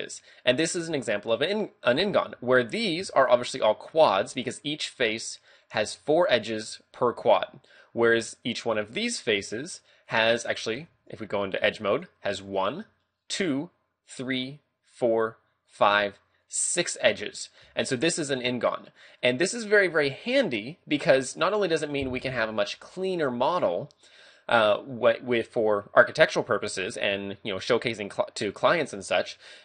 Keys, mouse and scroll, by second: 0.0 middle click, 2.3 a, 2.6 right click, 3.2 shift+right click, 3.6 shift+right click, 4.1 right click, 7.2 a, 8.3 right click, 9.1 right click, 10.1 right click, 10.9 ctrl+Tab, 12.5 right click, 13.2 shift+right click, 14.1 shift+right click, 14.9 shift+right click, 15.7 shift+right click, 16.5 shift+right click, 17.0 middle click, 17.6 a, 18.5 middle click, 20.5 middle click.